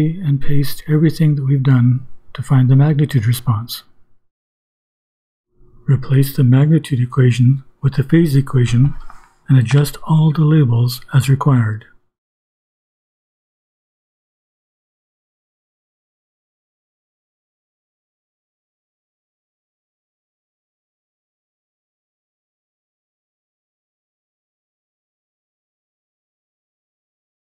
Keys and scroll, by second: 8.3-14.1 typing, 15.3-16.8 typing, 20.3 Right, 21.3 ;, 23.5-24.5 typing, 27.1-27.4 typing.